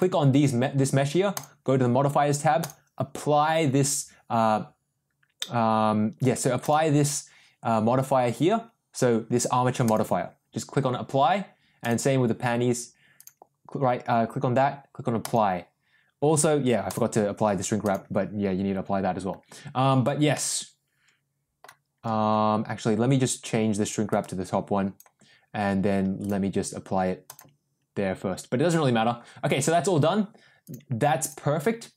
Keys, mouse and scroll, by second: 1.3 click, 2.6-5.1 drag, 6.5-10.1 drag, 13.2-15.5 drag, 16.9-18.1 drag, 20.3-21.5 middle drag, 22.5 ctrl+z, 24.0-25.0 drag, 26.2-27.6 drag, 30.6 click, 31.2 click.